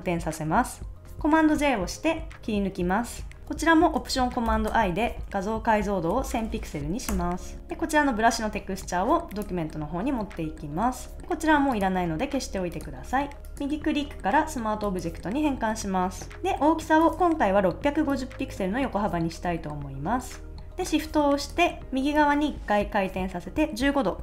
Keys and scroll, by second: 1.3 super+j, 5.8-6.7 typing, 7.1 Return.